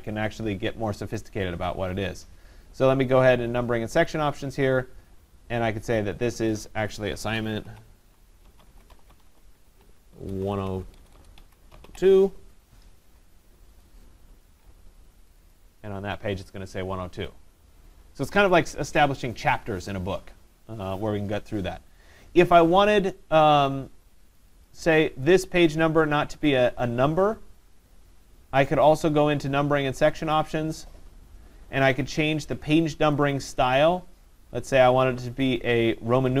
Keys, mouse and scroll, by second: 1.3 right click, 4.1 click, 6.9 click, 7.4-11.9 typing, 13.2-13.9 typing, 13.8 click, 15.3 click, 15.5 click, 24.4 click, 24.7 click, 29.0 right click, 30.4 click, 33.4 right click.